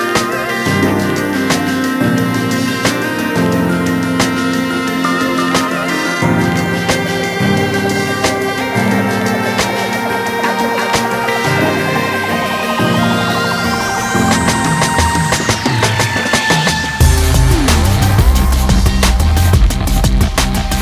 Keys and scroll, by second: 2.4 ctrl+space.